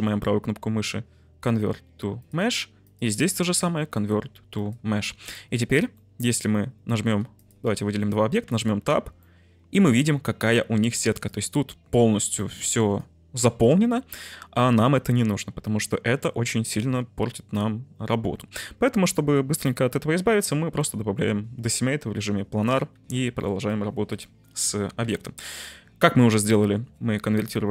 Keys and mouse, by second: 2.2-2.9 right drag, 2.9-4.6 drag, 4.6-5.9 right drag, 5.9 middle click, 7.3 shift+click, 8.5 Tab, 9.1 middle click, 11.3 click, 12.5 click, 12.6 3, 13.1 click, 16.9 Tab, 19.1 Tab, 22.9 Tab, 23.8-24.1 drag, 25.0 Delete, 26.4 shift+middle click.